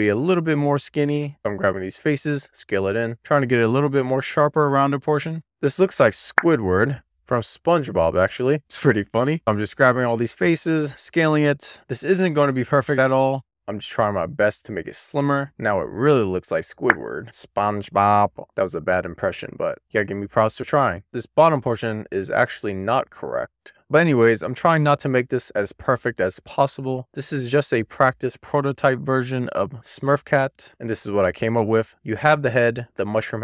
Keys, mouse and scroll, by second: 0.4 click, 1.0 scroll down 1, 1.4 shift+click, 2.0 e, 2.2 click, 2.9 1, 3.0 click, 3.7 click, 4.0 click, 4.3-5.3 click, 4.7 click, 5.5 middle click, 5.8 middle click, 6.3 3, 6.7 middle click, 7.1 ctrl+click, 7.3 ctrl+click, 9.1 middle click, 9.2 ctrl+click, 9.8 ctrl+click, 10.3 middle click, 10.6 ctrl+click, 10.8 middle click, 11.2 shift+click, 11.3 middle click, 11.5 scroll down 1, 11.7 middle click, 12.2 e, 12.4 click, 13.3 middle click, 13.8 middle click, 14.3 w, 14.5 click, 14.9 middle click, 15.2 scroll up 1, 15.3 middle click, 15.4 shift+click, 17.5-21.0 middle drag, 21.0 shift+click, 21.4 scroll down 2, 21.6 middle click, 21.8 r, 21.9 click, 22.1 middle click, 22.9 middle click, 23.0-23.5 scroll down 2, 23.5 scroll up 1, 23.7 click, 23.7 middle click, 24.5 Tab, 24.7 middle click, 24.9 scroll up 1, 25.0 click, 25.1 scroll down 1, 25.3 shift+click, 25.5 g, 25.7 middle click, 26.1 k, 26.3 middle click, 26.7 click, 27.0 middle click, 28.2 middle click, 28.7 scroll up 3, 28.8 click, 28.9 middle click, 29.4 click, 29.6 alt+Tab, 29.8 click, 30.1 click, 30.2 middle click, 30.4 click, 30.6 middle click, 30.7 scroll down 4, 31.0 middle click, 31.8 middle click, 32.9 click, 33.2 shift+middle click.